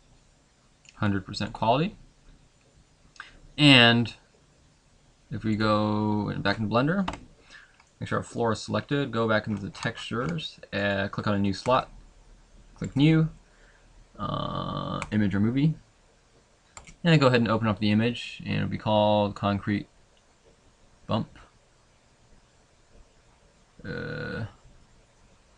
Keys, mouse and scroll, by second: 7.2 Escape, 7.9 middle click, 8.8 scroll down 1, 11.8 click, 11.8-12.3 scroll up 10.